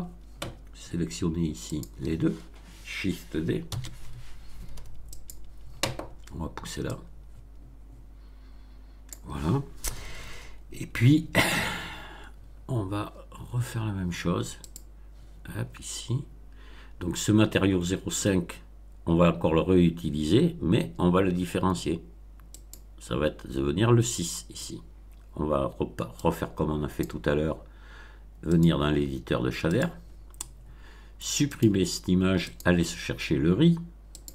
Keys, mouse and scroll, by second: 1.6 shift+click, 3.6 shift+d, 5.0 click, 6.8-9.2 drag, 14.6 click, 22.5 click, 26.1 click, 28.4 click, 29.6 click, 31.4 click, 32.4 click, 34.1 click.